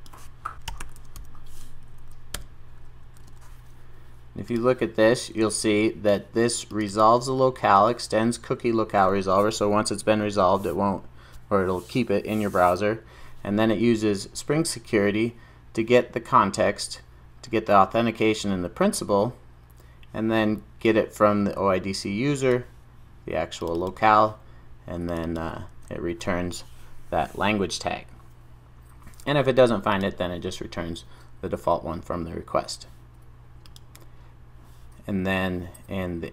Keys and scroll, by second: 0.5 super+j, 2.4 Return, 3.1 super+s.